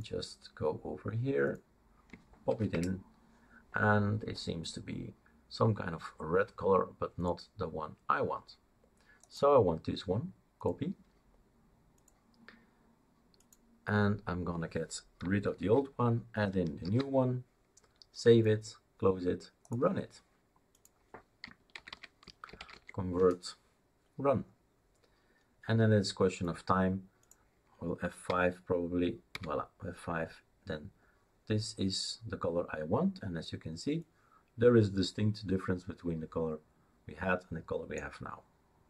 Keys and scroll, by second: 2.5 ctrl+v, 2.7 Return, 15.8 ctrl+v, 16.8 ctrl+s, 21.7-23.1 typing, 23.2 Return, 28.3 F5, 29.3 F5.